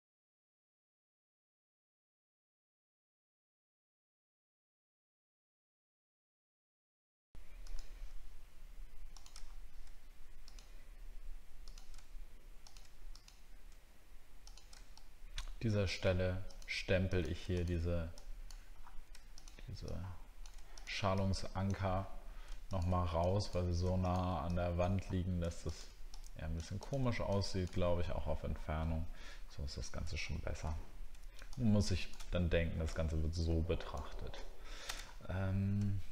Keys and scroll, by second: 4.1 alt+scroll down 1, 6.5 alt+scroll up 1, 9.4 alt+scroll up 1, 27.9 alt+scroll down 1, 31.5 alt+scroll down 1, 34.9 alt+scroll down 1, 35.3 alt+scroll up 1.